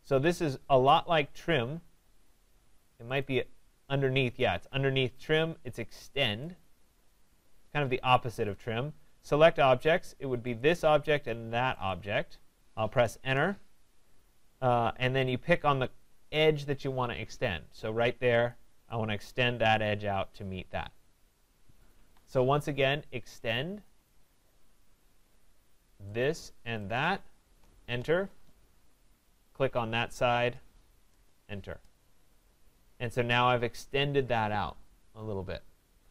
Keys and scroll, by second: 13.2 Return, 21.9 Escape, 27.8 Return.